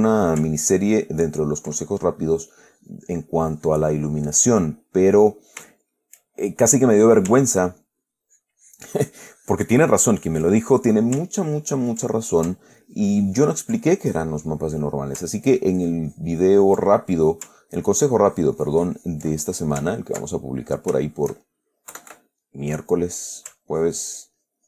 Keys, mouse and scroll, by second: 0.1-0.7 ctrl+middle drag, 1.0-2.1 ctrl+drag, 2.1-2.6 ctrl+middle drag, 2.8 ctrl+click, 3.7-4.8 drag, 4.8 click, 6.1 shift+click, 6.8 shift+click, 8.1-10.8 ctrl+drag, 10.8-11.3 ctrl+middle drag, 11.7 ctrl+click, 12.4 ctrl+middle click, 13.1 ctrl+click, 13.6 ctrl+click, 14.1 ctrl+middle click, 15.8-17.2 ctrl+drag, 17.2-17.7 ctrl+middle drag, 18.2-20.2 ctrl+drag, 20.2 ctrl+click, 20.8 ctrl+click, 22.2 KP_Add, 22.7 click, 24.0-24.6 ctrl+drag.